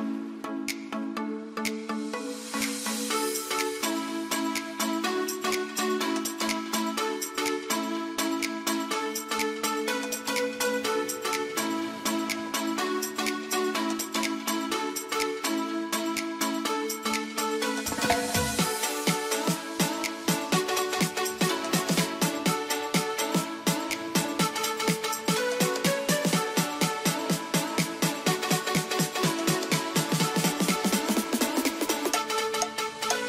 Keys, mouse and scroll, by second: 6.7-14.6 drag, 15.9 right click, 18.4 click, 18.8 F3, 20.4 click, 22.2 shift+Page_Up, 22.8 F2, 23.4-26.5 drag, 26.5 shift+c, 26.8-33.2 shift+drag.